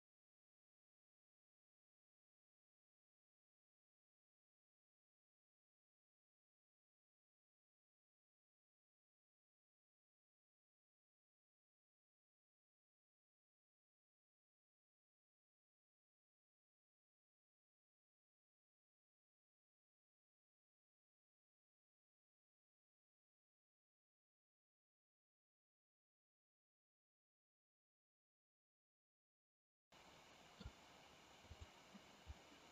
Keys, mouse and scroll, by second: 0.0 middle click, 0.3 click, 0.7-2.3 typing, 0.8 middle click, 1.0 middle click, 1.2 middle click, 1.9 click, 3.4 g, 3.7 click, 3.7 g, 4.2 g, 4.5 g, 6.0 g, 6.3 g, 6.4 click, 6.4 g, 7.2 g, 11.1 l, 11.3 g, 12.8-15.3 typing, 13.5 click, 13.7 click, 13.9 click, 14.4 click, 15.2 click, 15.5-16.7 drag, 16.7-17.1 h, 17.3 middle click, 17.9 ctrl+j, 18.1 click, 18.4 alt+h, 21.3 t, 21.5 click, 21.7 middle click, 22.4 click, 22.6 r, 22.7 click, 22.7 middle click, 23.1 middle click, 23.2 middle click, 23.5 g, 23.8 middle click, 24.0 g, 24.1 middle click, 24.5 middle click, 24.7 middle click, 24.9 middle click, 25.1 middle click, 25.3 click, 25.5 KP_1, 25.6 click, 25.9 middle click, 26.4 middle click, 26.6 click, 26.8-27.1 ctrl+z, 27.1 middle click, 27.3 middle drag, 27.5 middle click, 27.7 click, 27.9 click, 28.0 middle click, 28.1 g, 28.2 click, 28.3 g, 28.4 middle click, 28.7 middle click, 29.1 click, 29.4 click, 29.8-30.6 middle drag, 31.5 click, 32.3-32.7 middle drag.